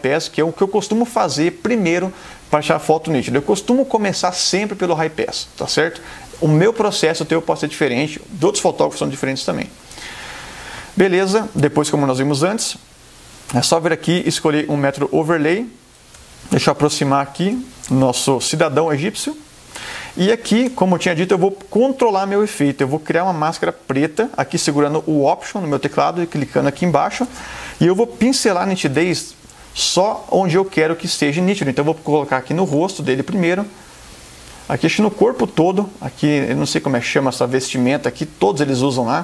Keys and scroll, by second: 16.3 super+=, 18.7 super+space, 29.1 b, 30.6 ].